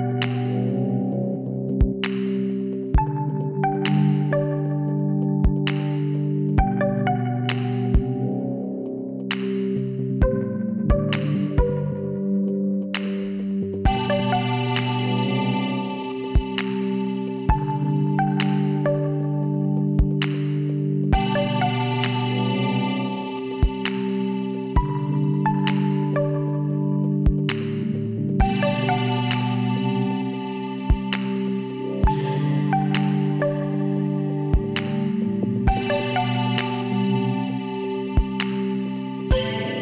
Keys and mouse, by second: 1.2 KP_1, 3.4-6.6 drag, 10.2-11.8 middle drag, 11.8-13.4 drag, 12.2 b, 13.4 g, 15.4 z, 16.3-17.3 drag, 17.3 KP_1, 18.2 b, 19.3-21.1 drag, 23.4-25.1 drag, 25.7-27.4 drag, 27.7 g, 30.7 e, 33.2 e, 36.1 e, 37.3-39.0 drag.